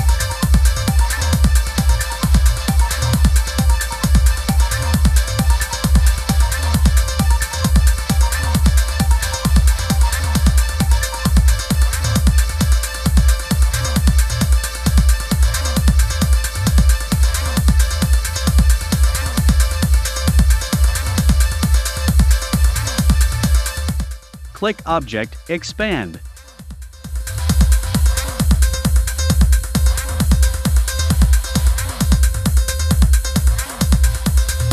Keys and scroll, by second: 5.8 shift+Up, 16.4 shift+Up, 28.6 i, 29.6 v.